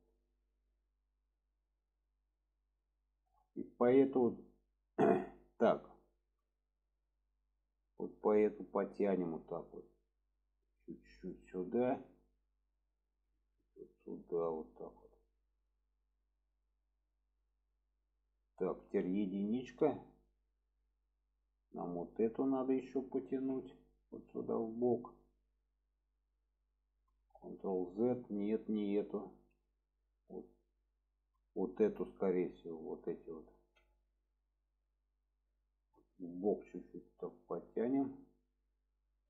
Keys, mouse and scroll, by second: 1.3-2.1 middle drag, 4.1 shift+middle click, 7.8 click, 11.4-12.2 middle drag, 13.0 click, 15.4-16.2 middle drag, 16.7-17.5 middle drag, 17.9 middle click, 19.5 click, 20.0 alt+z, 20.8-21.7 middle drag, 22.6 click, 23.3 alt+z, 23.7 middle click, 26.2 click, 27.4 ctrl+z, 29.3 alt+z, 30.8-31.5 middle drag, 32.8 click, 33.6 alt+z, 34.2-35.5 middle drag, 36.4-38.0 drag, 38.3-39.2 middle drag.